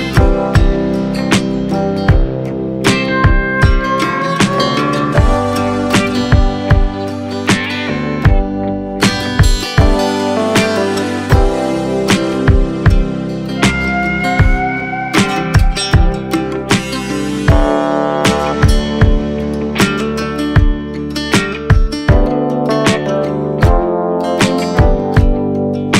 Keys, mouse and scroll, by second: 0.3-3.0 drag, 5.1 scroll up 3, 5.5-7.2 scroll down 1, 7.2 click, 9.4 click, 13.0-16.0 drag, 16.0 scroll down 1, 16.1-17.4 middle drag, 17.4 scroll down 1, 21.0 click, 22.2 click, 23.0-24.9 drag, 25.8 click.